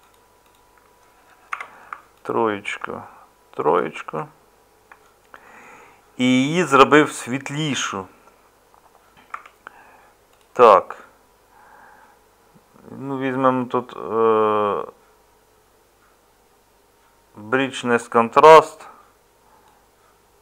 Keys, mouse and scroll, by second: 1.5 3, 9.3 Tab.